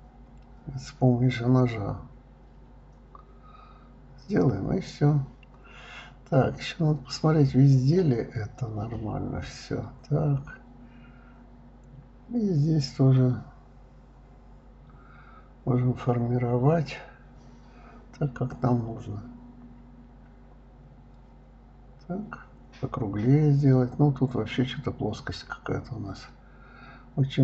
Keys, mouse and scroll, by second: 2.5 click, 2.8-3.7 middle drag, 3.7-5.0 scroll down 2, 5.0 scroll up 1, 5.1 middle click, 5.8 KP_1, 6.9 click, 7.3 shift+click, 8.2 g, 10.5 drag, 12.2 g, 13.8 click, 14.9-16.4 middle drag, 17.8 click, 18.3 shift+click, 19.6 g, 21.5-23.0 middle drag, 23.1 click, 24.4 click, 25.2 click, 25.4 click, 25.9 right click, 27.0 g.